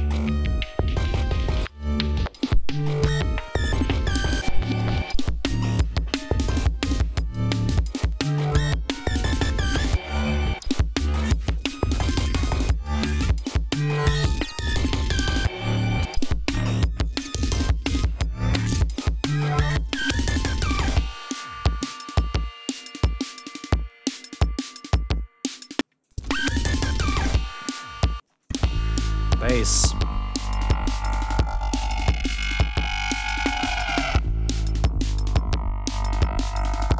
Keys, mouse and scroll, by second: 21.0 ctrl+scroll down 2, 21.7 ctrl+scroll up 2, 25.4 ctrl+scroll down 1, 26.1 ctrl+space, 26.3 ctrl+click, 26.7 ctrl+scroll up 1, 28.5 space, 28.7 click, 29.4 scroll down 2, 30.7-31.0 scroll down 2, 31.3 scroll down 2, 32.7 ctrl+scroll down 2, 33.5-34.0 ctrl+scroll down 5, 36.6 scroll down 2.